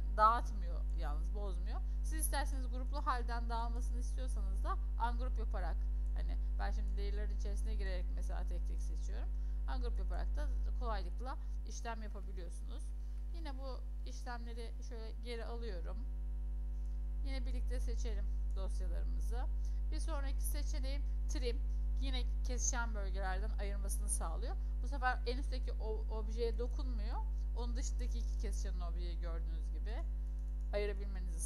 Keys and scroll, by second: 11.9 ctrl+z, 12.2 ctrl+z, 13.5 ctrl+z, 14.1 ctrl+z.